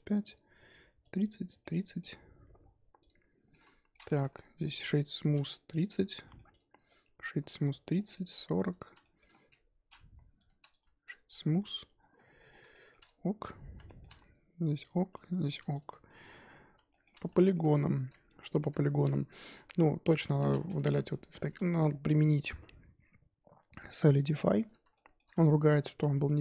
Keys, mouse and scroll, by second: 0.3 click, 1.1 click, 1.6-2.3 middle drag, 2.3-3.0 scroll down 4, 3.0 click, 3.5-5.0 middle drag, 5.0-5.7 scroll up 1, 5.7 click, 6.2 middle click, 6.5 click, 6.8 shift+middle click, 7.8 click, 7.9 scroll down 2, 8.1 shift+middle click, 8.7 click, 9.0 shift+middle drag, 9.3-10.3 scroll up 1, 10.3 click, 11.1 right drag, 11.2-11.8 scroll up 4, 11.8 click, 12.0-12.7 scroll down 10, 12.7-13.0 shift+middle drag, 13.0 scroll up 1, 13.4 click, 13.8 shift+middle drag, 14.1-14.8 scroll up 1, 14.8 click, 15.1 shift+middle click, 15.7 click, 16.0 middle drag, 16.3-16.9 scroll up 1, 16.9-19.7 shift+middle drag, 19.7-20.0 scroll up 1, 20.0 click, 20.2 shift+middle drag, 20.4-20.7 scroll up 4, 20.7 3, 21.5 Tab, 24.6 click, 24.9-26.3 shift+middle drag, 26.3 z.